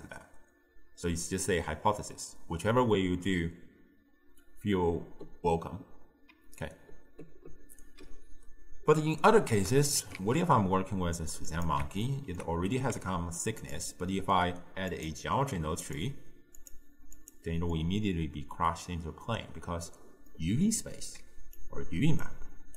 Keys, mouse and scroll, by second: 6.4 d, 6.6-7.9 right drag, 7.9 d, 8.8 d, 9.2-10.2 shift+middle drag, 10.2 shift+a, 12.1-12.8 ctrl+middle drag, 12.8 g, 14.0-14.9 shift+middle drag, 16.0-17.8 drag, 17.8-21.3 middle drag, 21.3 d, 21.6 click, 22.3-22.7 d.